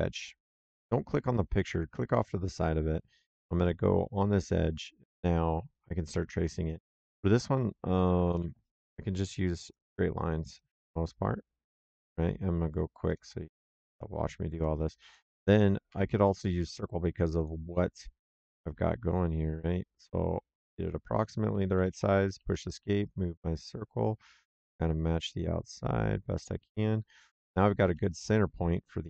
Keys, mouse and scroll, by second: 0.4 click, 3.5 click, 5.0 click, 6.3 middle click, 8.2 l, 9.5 click, 11.8 click, 13.0 click, 14.4 click, 14.9 Escape, 15.8 c, 17.3 click, 21.0 click, 21.6 Escape, 22.9 click, 27.4 c, 28.1 click.